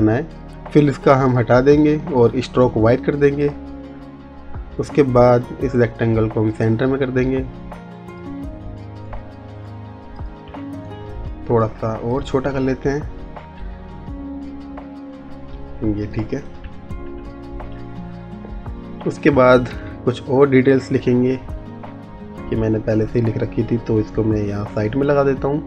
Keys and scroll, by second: 19.7 ctrl+v.